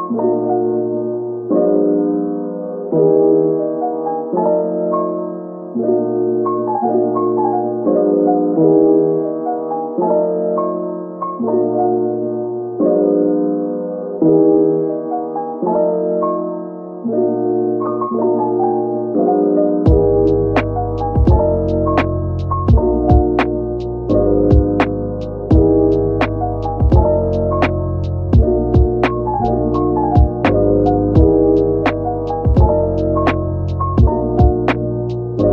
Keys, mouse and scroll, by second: 0.4 ctrl+r, 0.8-1.3 scroll up 1, 1.3-2.2 scroll down 1, 2.5-3.2 scroll up 1, 3.2 double click, 3.5 ctrl+r, 3.9 scroll up 1, 5.8 scroll up 1, 6.4 right click, 6.8 ctrl+r, 9.0 3, 10.4 middle click, 11.9 shift+click, 12.6 middle click, 13.6 right click, 16.2-17.0 scroll up 1, 18.7 right click, 21.2 typing, 23.9 middle click, 24.6 Tab, 24.8 scroll down 1, 25.1 middle click, 25.7 Tab, 26.1 Tab, 27.1 Tab, 28.9 Tab, 29.6 double click, 30.2 Tab, 31.0 click, 31.4 Tab, 32.3 a, 33.5 scroll up 1, 34.2 a, 34.3 ctrl+b.